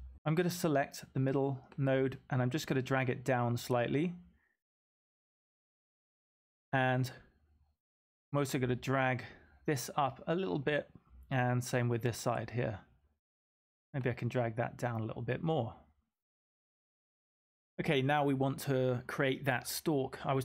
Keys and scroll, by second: 17.5 m.